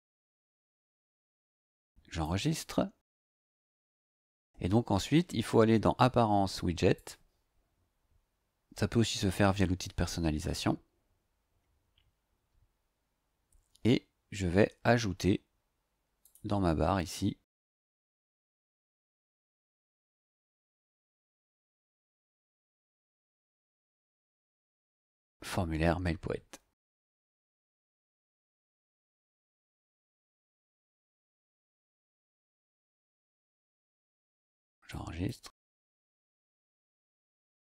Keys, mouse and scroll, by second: 2.2 click, 6.9 click, 15.1 scroll down 2, 16.2 click, 18.8 click, 20.8-21.9 typing, 28.1 click, 34.9 click.